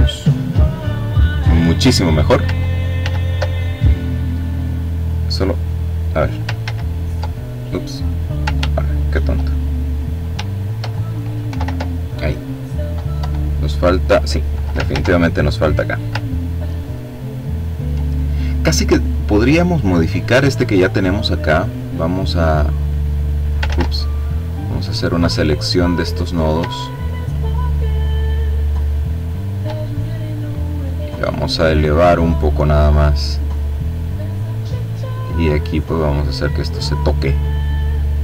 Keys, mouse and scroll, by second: 2.2 ctrl+z, 5.9 ctrl+z, 10.7 ctrl+y, 11.5 click, 12.4 Delete, 14.1 ctrl+z, 15.3-15.9 ctrl+scroll up 2, 16.1-17.5 ctrl+drag, 18.1 click, 19.5 click, 21.7-23.2 drag, 22.9 ctrl+z, 23.7-25.7 drag, 26.1 shift+click, 27.1 click, 30.2-33.8 drag, 34.7-36.3 drag, 37.9-38.2 drag.